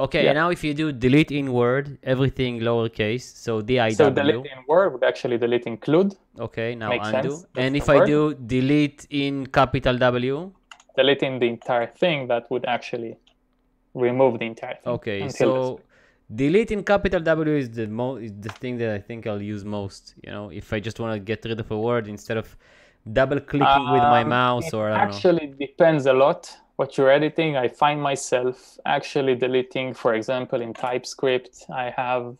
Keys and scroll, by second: 3.9-5.3 typing, 7.6 u, 10.4-11.5 typing, 18.6 u, 30.7 a.